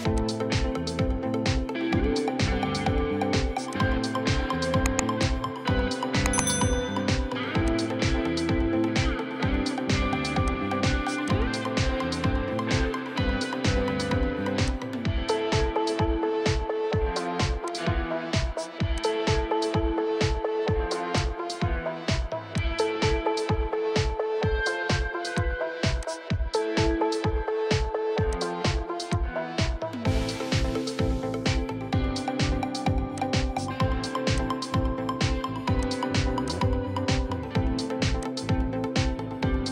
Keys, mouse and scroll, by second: 6.6 right click, 8.0-8.3 scroll down 1, 8.3 middle click, 9.1 right click, 13.5-14.8 scroll up 1, 26.5 scroll up 1, 26.7-27.3 scroll down 1, 27.3 right click.